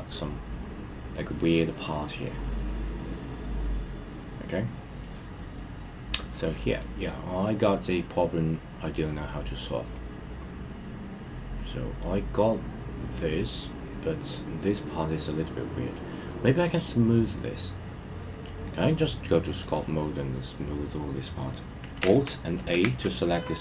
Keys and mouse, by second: 5.0-7.3 middle drag, 10.0-13.7 middle drag, 15.9-16.7 middle drag, 18.8-19.7 drag, 22.8 alt+a.